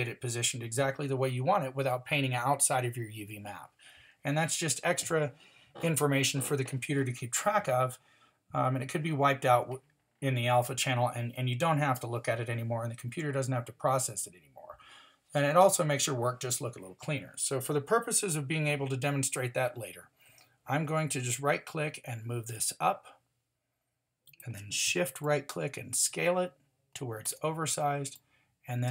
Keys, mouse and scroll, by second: 21.3-23.1 drag, 25.2-26.5 drag.